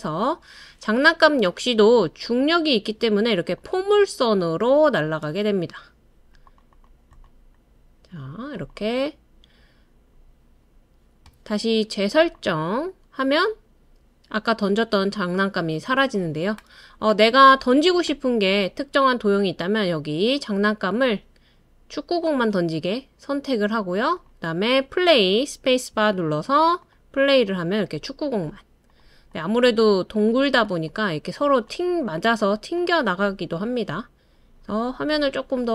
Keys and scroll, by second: 25.7-26.4 typing.